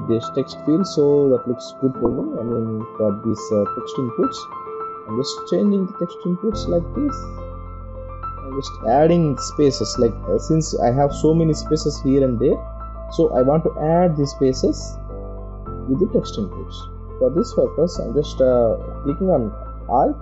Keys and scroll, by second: 4.5 ctrl+t, 13.1 Return, 14.0 ctrl+=, 14.9 space, 16.9 alt+space, 17.8 ctrl+z, 18.3 space.